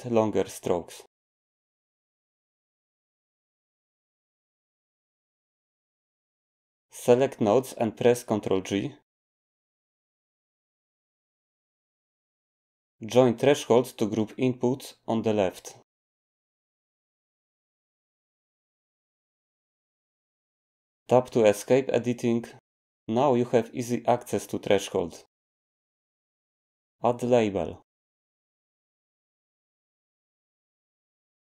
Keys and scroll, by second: 0.1 5, 1.1 Return, 11.5 ctrl+g, 21.5 Tab, 28.6-31.4 typing.